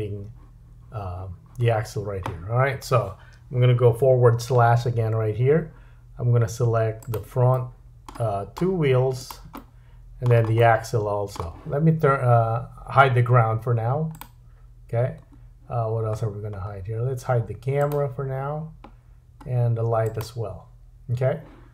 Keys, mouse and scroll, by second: 4.9 /, 7.2-9.2 middle drag, 8.3-8.9 scroll up 2, 9.2 shift+click, 9.3-12.4 shift+middle drag, 14.2 click, 15.8-16.1 scroll down 2, 16.1-17.8 scroll up 2, 17.8 click, 19.0 scroll down 2, 20.1 click.